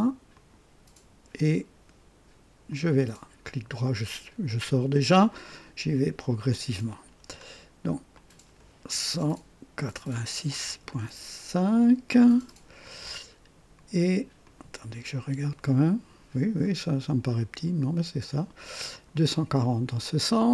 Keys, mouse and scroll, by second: 0.3 click, 2.7 click, 3.4 right click, 5.3 right click, 6.5 click, 8.1 click, 9.2-10.8 typing, 11.6 KP_Enter, 14.0 typing, 14.4 click, 16.6 click, 18.9 click, 20.4 click.